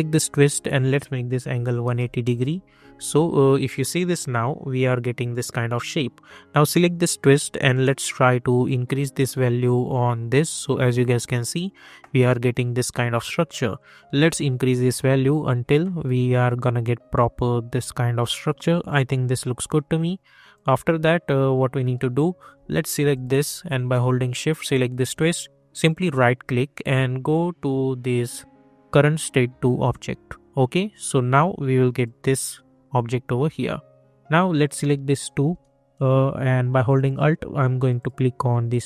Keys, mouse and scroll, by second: 2.2 Return, 3.9 click, 6.6-13.7 drag, 13.7-20.5 drag, 21.9 middle click, 23.1 click, 25.8 right click, 29.9 click, 34.5 click.